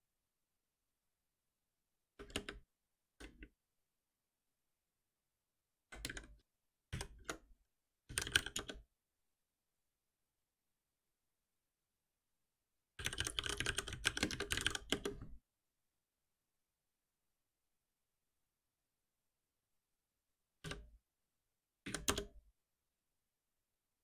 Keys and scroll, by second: 2.1 alt+Return, 6.9 ctrl+alt+m, 12.1 shift+F6, 20.6 F6, 21.8 Down.